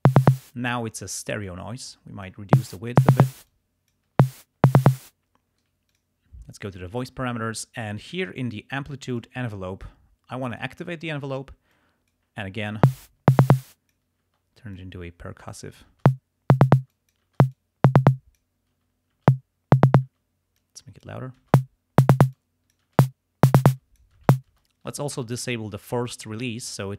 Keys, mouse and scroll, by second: 0.3 space, 1.5-2.6 drag, 2.5 space, 3.4 space, 3.5 click, 4.2 space, 4.9 space, 5.9 click, 9.1 click, 10.5 click, 11.8 click, 12.7 space, 12.9-14.1 drag, 14.2 space, 14.8 click, 16.0 space, 16.8 space, 16.9 click, 17.7 click, 18.7 space, 20.0 space, 20.6 click, 21.4 space, 22.3 space, 22.4 click, 23.0 space, 23.7 click, 23.7 space, 25.8 click.